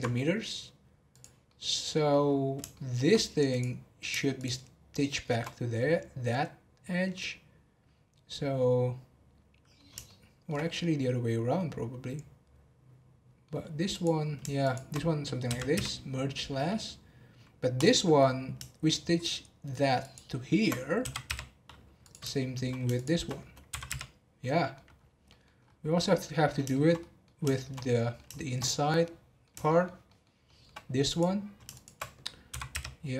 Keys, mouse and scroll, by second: 1.1 click, 1.4 middle click, 2.3 scroll up 1, 2.7 shift+middle click, 3.5 click, 4.3 shift+click, 7.1-13.6 middle drag, 13.9 click, 14.6 shift+click, 17.7 click, 20.0 shift+click, 22.0 click, 22.4 shift+middle click, 22.9 shift+click, 23.9 m, 24.2 scroll down 2, 24.5 middle click, 24.9 scroll down 1, 25.2 middle click, 25.6-25.9 scroll up 2, 25.9-28.6 middle drag, 28.6 scroll up 4, 28.9-31.1 middle drag, 31.1 click, 31.7 shift+click, 32.4 m.